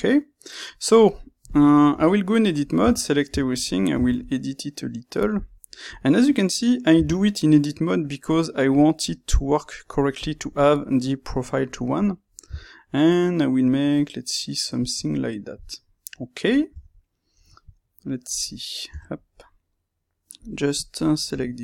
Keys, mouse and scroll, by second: 1.5 click, 1.8 Tab, 2.7 a, 5.2 click, 6.9 g, 10.2 click, 10.6-14.9 middle drag, 12.4 s, 14.9 click, 15.0-21.6 middle drag, 16.6 Tab, 18.8 Tab, 21.3 Tab.